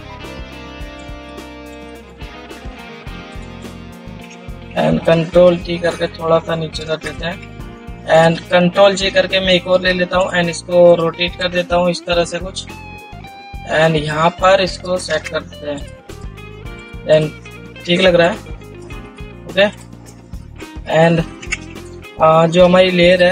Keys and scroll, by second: 5.1 ctrl+t, 9.3 ctrl+j, 10.1 ctrl+t, 21.0 ctrl+0, 21.2 ctrl++, 21.8 ctrl+0.